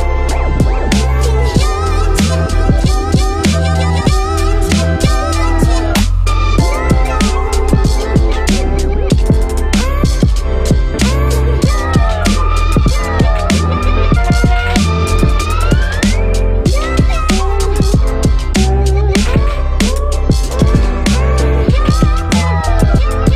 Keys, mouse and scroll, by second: 0.6 ctrl+-, 4.8 space, 7.8 ctrl+-, 8.0 space, 8.2 space, 9.1 ctrl+-, 9.3 space, 9.7 space, 14.4 space, 17.8 space, 18.9 space, 20.6 ctrl+-, 22.9 ctrl+-, 23.2 ctrl+-.